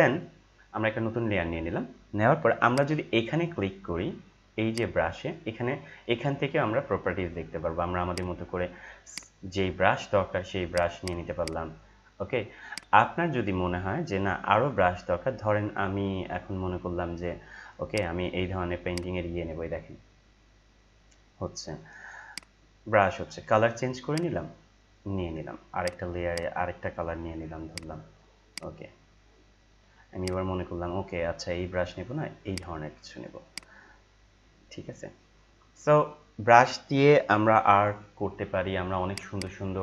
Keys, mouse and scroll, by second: 2.7 click, 8.1 click, 13.5-13.9 scroll down 1, 17.8-24.1 drag, 24.1-30.2 drag, 30.2 right click, 31.5 scroll down 1, 32.4-39.8 drag.